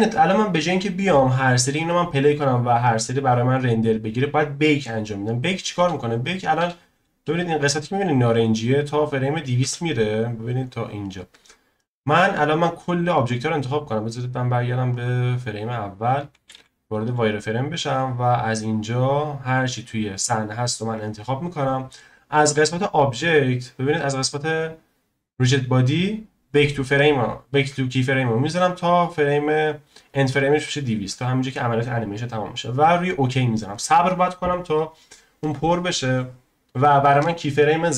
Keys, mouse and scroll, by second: 9.6 space, 10.4 click, 11.5 scroll down 1, 13.8 click, 14.9-17.1 drag, 17.1 z, 19.1 click.